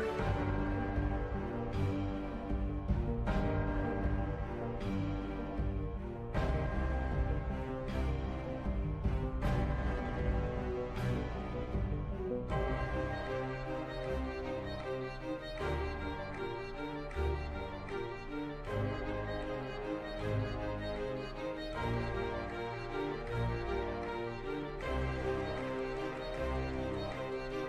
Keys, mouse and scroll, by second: 2.4 click, 4.8-8.3 drag, 9.1 click, 10.9 shift+a, 15.1-18.1 drag.